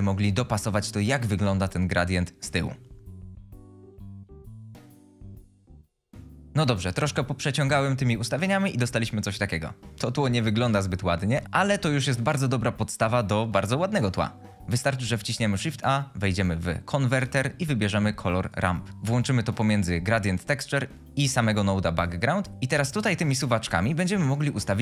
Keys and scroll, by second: 15.3 a.